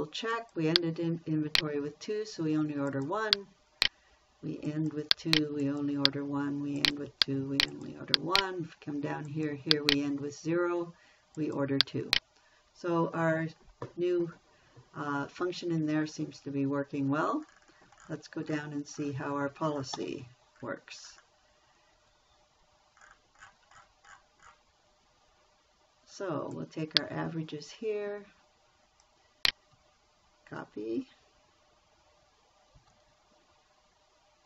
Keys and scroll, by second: 22.3 Escape, 33.2 ctrl+c.